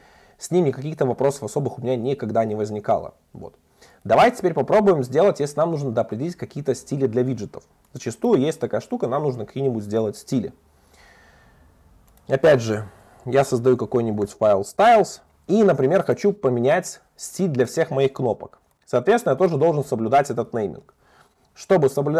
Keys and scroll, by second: 4.7 super+1.